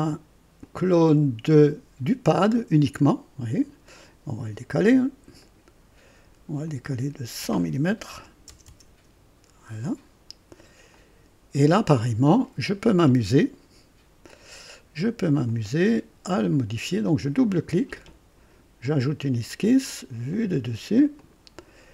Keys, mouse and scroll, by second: 0.6 click, 1.5 click, 3.9 click, 4.9 click, 5.4 click, 6.7 click, 8.1-9.3 typing, 10.9 click, 14.2 click, 15.4 click, 17.0 click, 18.8 click, 20.3 click, 21.2 click.